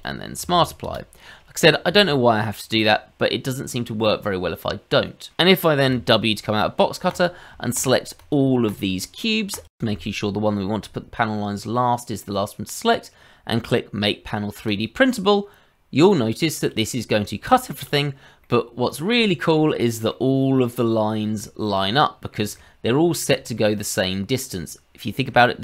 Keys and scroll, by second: 0.3 q, 0.5 q, 6.3 w.